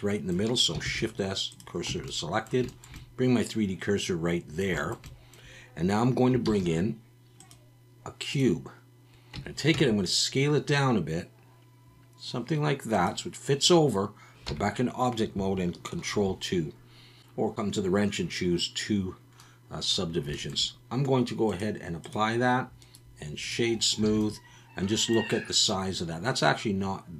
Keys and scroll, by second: 0.8 shift+s, 1.9 Tab, 6.4 shift+a, 9.3 Tab, 9.7 s, 14.5 Tab, 16.1 ctrl+2, 24.1 alt+a.